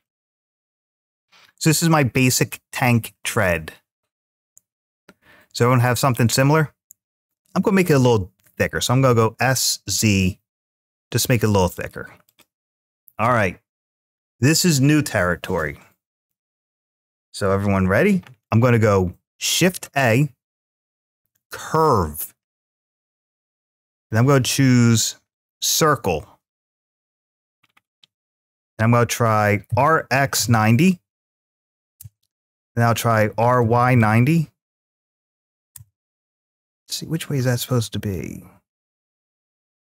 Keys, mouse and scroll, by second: 6.0-7.1 middle drag, 9.4 z, 11.6 click, 12.1 click, 26.4 scroll down 1, 27.2 scroll down 5, 29.5 scroll up 3, 29.5 r, 29.8 x, 30.2 9, 31.8 Return, 33.4 y, 34.9 0, 35.5 Return, 37.6 r.